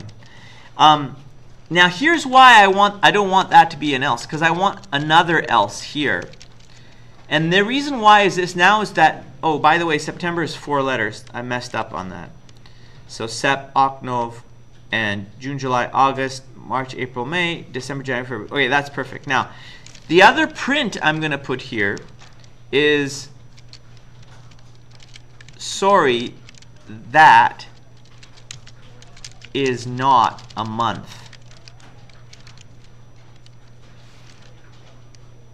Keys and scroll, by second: 0.3 Down, 1.6 Down, 1.9 Down, 2.0 Down, 2.8 Return, 3.4-6.3 typing, 6.8 Return, 9.4 Up, 9.6 Up, 10.1 Right, 10.7 Right, 11.1 Right, 11.7 Delete, 14.7 Up, 15.1 Up, 18.4 Down, 18.7 Down, 18.9 Down, 19.1 Down, 20.3-22.1 typing, 23.6-32.4 typing, 35.2 Left.